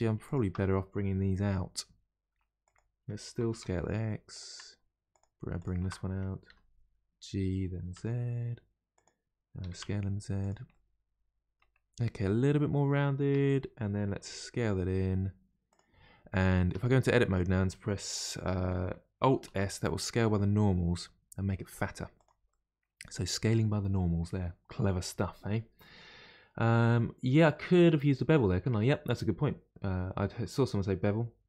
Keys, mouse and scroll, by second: 0.2 alt+click, 1.2 g, 5.1 click, 6.5 g, 9.6 s, 10.7-11.8 middle drag, 11.8-12.2 scroll down 2, 12.2-13.3 middle drag, 13.3 Tab, 14.2 s, 16.1-16.7 scroll up 2, 16.7 Tab, 17.2 a, 18.4-19.5 middle drag, 19.5 alt+s, 22.5-25.5 middle drag.